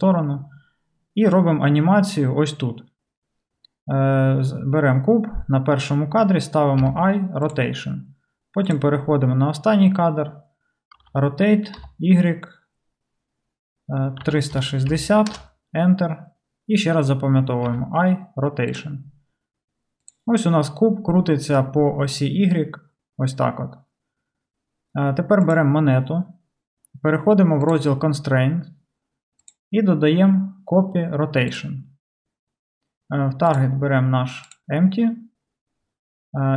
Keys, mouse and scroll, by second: 6.8 i, 8.7-25.6 drag, 11.0 r, 17.7 i, 25.5-29.5 middle drag, 27.7 click, 29.5-33.6 drag, 33.6-36.5 middle drag.